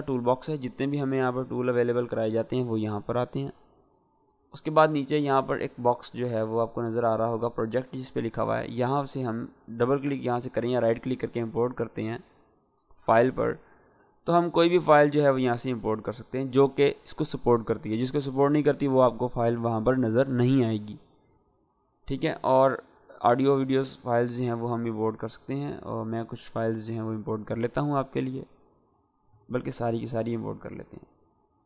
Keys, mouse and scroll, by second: 4.6 click, 4.6 click, 8.9 click, 8.9 click, 10.0 right click, 11.3 click, 21.1 right click, 21.8 click, 26.1 click, 28.1-29.1 scroll down 2, 29.1 ctrl+a, 29.8 click.